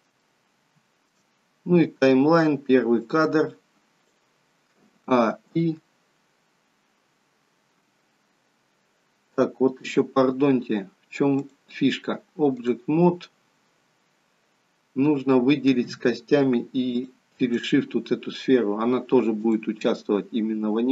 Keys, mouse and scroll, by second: 4.9 a, 5.4 i, 11.4 click, 16.9 shift+click, 19.4 click.